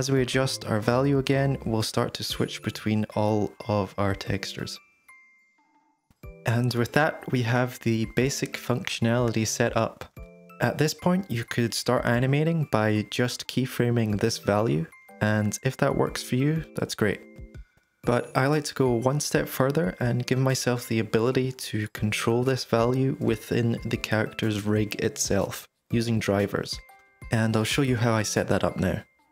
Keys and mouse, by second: 0.3 shift+d, 1.4 click, 2.8 click, 4.3-5.2 drag, 5.4 middle click, 6.8-13.4 drag, 16.7-19.0 middle drag, 19.5 middle click.